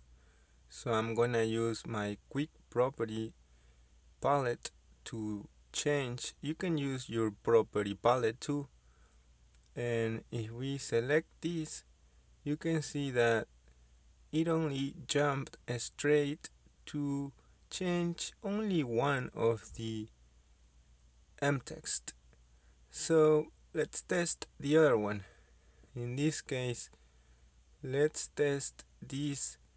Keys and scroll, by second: 18.3 Escape, 29.6 Delete.